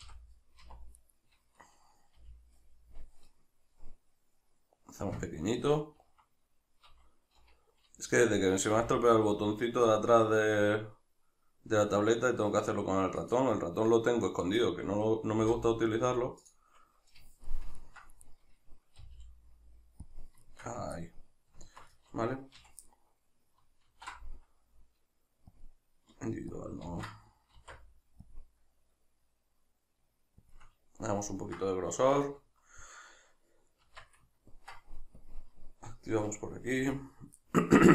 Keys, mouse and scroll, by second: 0.0 o, 1.0 right click, 1.6-13.3 middle drag, 2.2 g, 13.3 click, 14.4 right click, 15.4 g, 16.4 click, 17.5-18.2 ctrl+middle drag, 18.2 right click, 19.0 g, 20.2 click, 20.4-26.6 shift+middle drag, 22.6 a, 23.9 alt+e, 26.6 click, 26.8 ctrl+z, 27.6 alt+e, 30.6 shift+click, 30.7-35.2 middle drag, 33.8 Tab, 35.2-36.8 drag, 36.8 a, 37.4-37.9 middle drag.